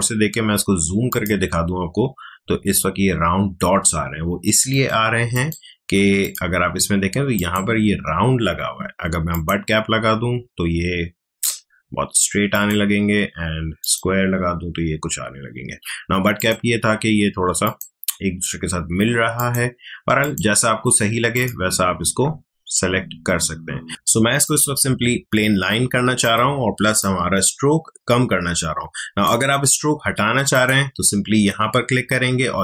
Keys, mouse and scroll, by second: 1.1 click, 1.8 alt+scroll up 1, 12.5 click, 16.4 click, 22.2-22.8 alt+scroll down 1, 23.9 click.